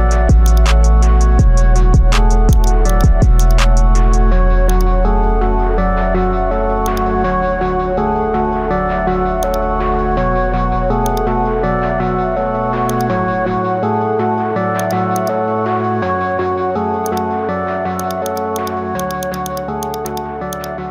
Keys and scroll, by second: 14.3 ctrl+alt+z, 16.1 ctrl+alt+z.